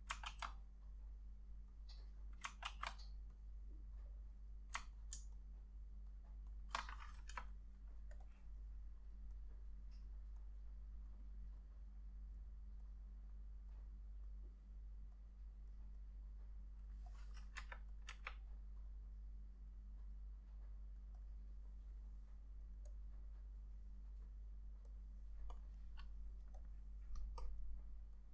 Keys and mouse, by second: 0.4 ctrl+z, 2.8 ctrl+z, 5.1 ctrl+click, 7.0 ctrl+shift+click, 7.4 Delete, 17.7 Delete, 18.2 Delete, 23.0 double click.